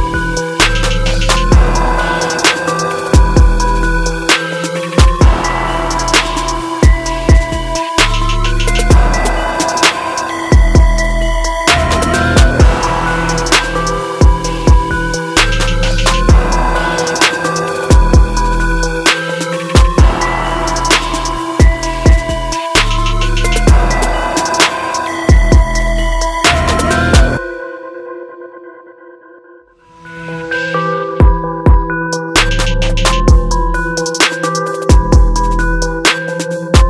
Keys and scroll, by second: 28.6 ctrl+t.